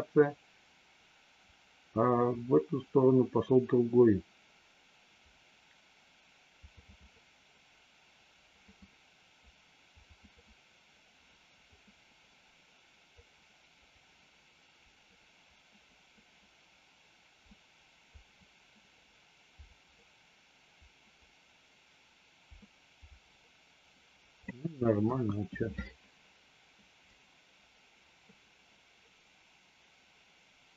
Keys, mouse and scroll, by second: 25.0 KP_1, 27.1-30.7 drag.